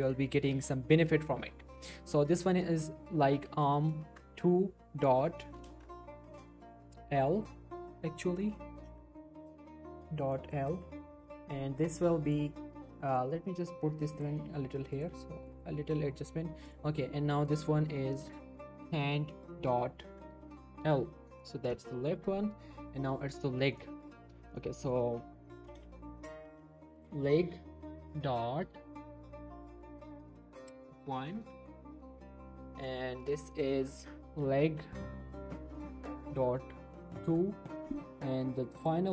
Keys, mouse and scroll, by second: 2.3 shift+middle click, 2.7 click, 3.1-5.1 typing, 10.7 shift+l, 10.9 Return, 12.3 click, 13.4 g, 14.1 click, 15.1 g, 15.5 click, 18.2-19.7 typing, 20.8 shift+l, 21.7 Return, 22.5 scroll down 1, 22.8 shift+middle click, 23.0 shift+scroll, 23.1-23.7 shift+scroll up 2, 23.2 shift+middle click, 23.7 click, 25.7 shift+l, 26.6 shift+l, 27.2 e, 28.6 ., 31.3 Return, 32.8 click, 34.3-34.8 typing, 35.9 ., 37.1 2, 37.2 Return, 38.8 click.